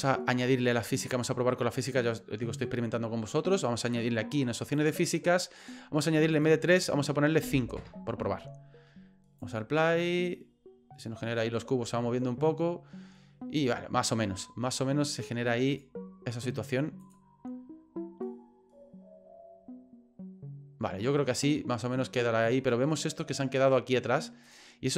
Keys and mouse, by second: 0.0 click, 2.6 middle click, 4.7 click, 6.3-8.3 drag, 9.4 click, 15.1 click, 15.8 click, 24.5 click.